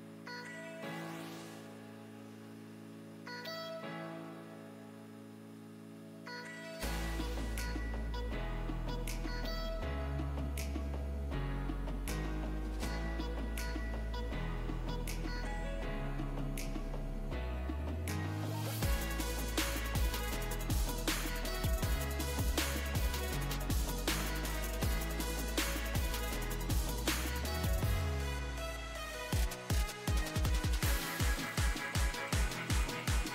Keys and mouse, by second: 29.4-33.3 middle drag.